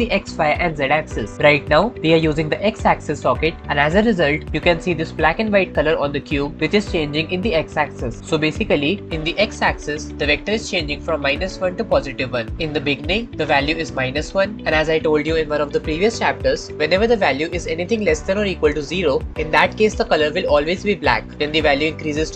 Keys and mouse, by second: 8.2 middle click.